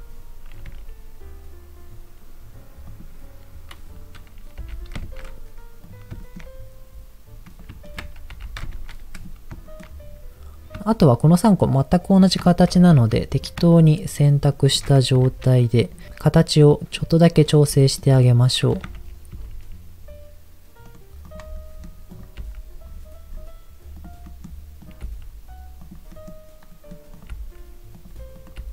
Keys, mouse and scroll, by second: 0.6 r, 2.9-3.9 drag, 4.6 g, 5.0 shift+z, 5.8 click, 6.2 shift+middle click, 6.6 scroll up 1, 7.5 click, 7.8 ctrl+click, 8.3 g, 8.7 shift+z, 9.1 click, 9.6 shift+middle click, 9.9-10.3 scroll up 4, 12.4 shift+middle click, 12.6-13.1 shift+scroll up 4, 13.2 shift+middle click, 13.7 shift+middle click, 14.5 shift+middle click, 14.9 scroll up 2, 15.2 Tab, 15.8 click, 16.3 click, 17.3 click, 17.7 middle click, 19.3 a, 19.3 s, 20.9 right click, 21.2 click, 21.5 middle click, 22.1 click, 22.4 g, 22.9 scroll down 2, 23.9 click, 23.9 scroll down 2, 24.2 middle click, 24.8 click, 25.1 g, 25.8 click, 26.1 middle click, 26.7 middle click, 27.1 click, 27.3 g, 27.7 scroll up 1, 27.9 click, 28.3 click, 28.6 g.